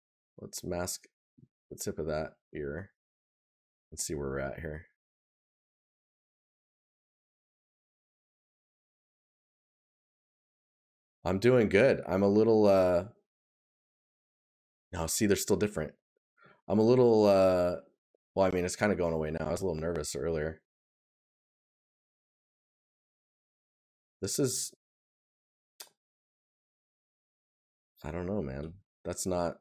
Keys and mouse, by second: 1.6 right click, 6.4 right click, 9.0 right click, 15.3 right click, 24.4 right click.